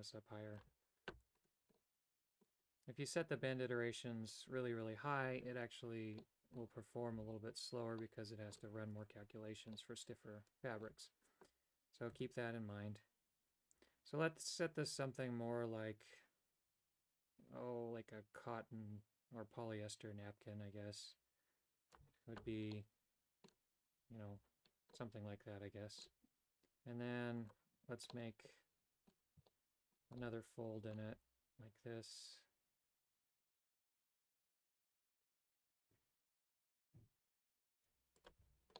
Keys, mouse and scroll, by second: 1.9 middle click, 6.3 middle click, 7.4 a, 8.1 middle click, 9.8-11.0 middle drag, 12.4-22.1 shift+drag, 22.9 middle click, 25.1-26.3 middle drag, 28.3 middle click, 29.6 shift+middle click, 30.3 middle click, 31.4 g, 38.6 a.